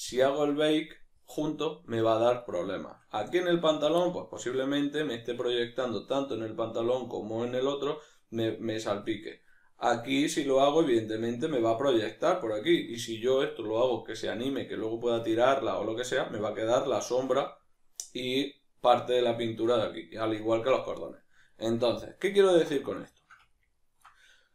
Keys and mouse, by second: 3.5 right click, 4.1-24.5 ctrl+middle drag.